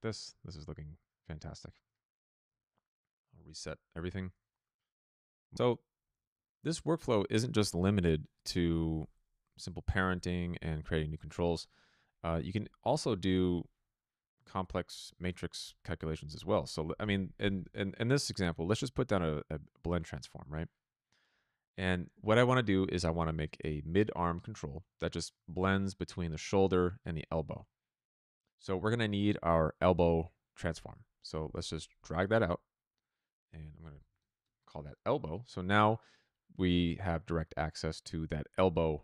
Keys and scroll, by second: 1.4 ctrl+z, 2.4 n, 16.9 Tab, 17.1-18.2 typing, 18.7 Return, 34.3 Return.